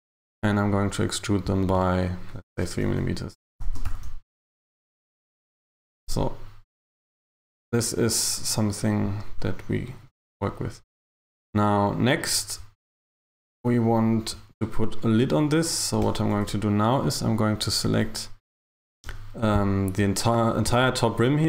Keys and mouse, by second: 3.7 e, 3.9 g, 6.1 Tab, 16.1 Tab, 17.9 KP_1.